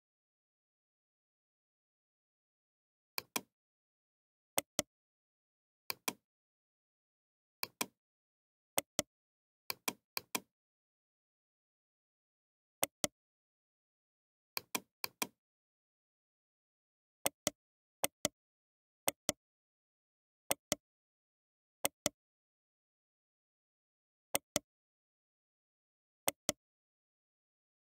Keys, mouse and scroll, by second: 4.5-6.3 right drag, 8.8-10.4 right drag, 10.7 click, 10.8 BackSpace, 12.8-13.9 right drag, 14.5 click, 14.9-18.0 drag, 18.0-19.6 right drag, 18.2 r, 19.6-21.3 middle drag, 19.9 r, 21.3 g, 22.3 middle click, 23.8 g, 25.1 g.